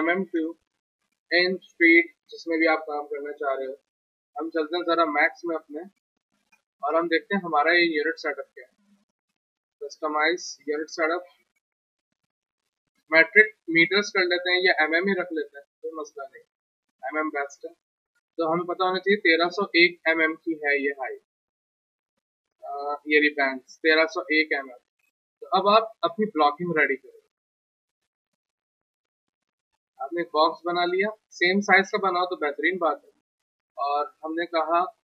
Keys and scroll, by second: 0.0-0.7 typing, 5.2-6.0 typing, 18.1 alt+Tab, 24.3 alt+Tab, 31.5 w, 31.8 z, 33.2 F3.